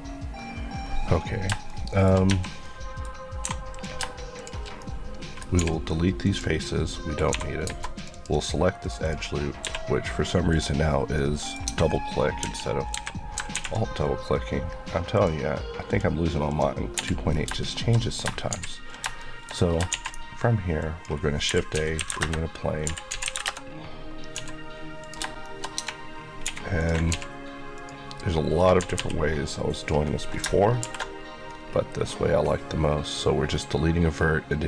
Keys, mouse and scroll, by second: 1.2-1.7 scroll down 2, 1.7 shift+middle click, 2.1 shift+scroll up 2, 2.3 Tab, 2.6 middle click, 3.0 scroll up 1, 3.4 3, 3.7 click, 4.4 shift+click, 4.8 middle click, 5.6 x, 6.2 click, 6.7 scroll up 1, 8.1 click, 9.6 q, 10.5 click, 11.1 middle click, 11.7 Tab, 12.4 KP_1, 12.9 KP_3, 15.1 click, 17.0 Escape, 17.3 scroll down 1, 17.6 shift+middle click, 18.5 shift+c, 19.2 shift+middle click, 19.5 scroll up 1, 19.9 shift+a, 20.8 click, 21.5-23.3 typing, 22.2 KP_Enter, 23.4 KP_Enter, 24.4 s, 25.0 click, 25.4 shift+middle click, 25.8 Tab, 26.5 1, 26.8 click, 27.1 x, 27.8 click, 28.8 typing, 29.7 click, 30.8 ctrl+shift+b, 31.5 scroll up 1, 32.9-34.2 scroll up 1.